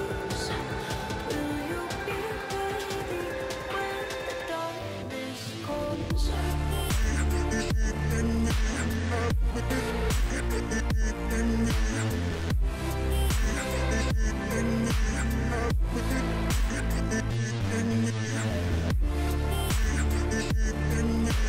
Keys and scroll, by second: 19.6 ctrl+r.